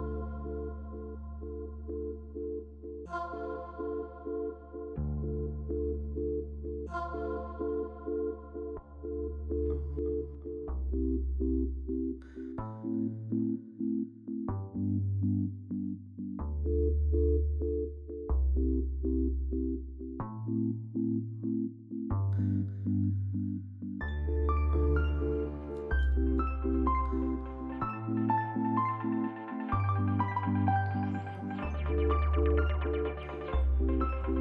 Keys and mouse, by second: 0.1 g, 2.2-5.7 drag, 6.1 Tab, 6.6 Tab, 7.6 alt+shift+click, 8.1 alt+shift+click, 8.7 p, 10.8 Tab, 11.2-12.3 drag, 12.6-16.9 drag, 14.4 BackSpace, 14.5 BackSpace, 16.9 ctrl+F4, 18.2 click, 19.0 click, 19.5 a, 20.7 alt+shift+click, 22.7-24.0 drag, 25.2 click, 26.7 click, 28.0-31.7 drag.